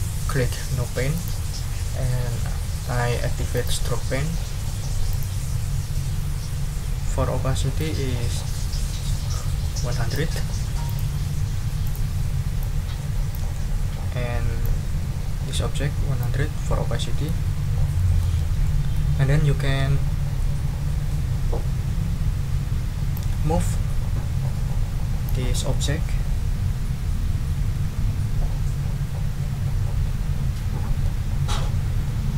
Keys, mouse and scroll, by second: 1.1 click, 3.5 click, 5.1 click, 7.8-10.3 drag, 10.8 click, 11.8 click, 12.6 click, 14.6-16.4 drag, 17.0 middle click, 17.5 ctrl+scroll up 2, 17.9 ctrl+middle click, 18.6 ctrl+middle click, 23.1-24.5 middle drag, 25.1 click.